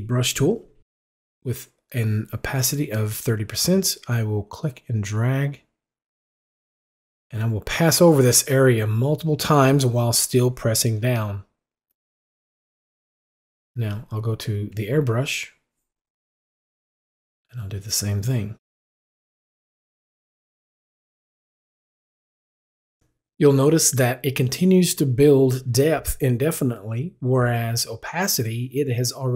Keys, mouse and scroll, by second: 3.8-11.0 drag, 13.9 click, 17.9-29.3 drag.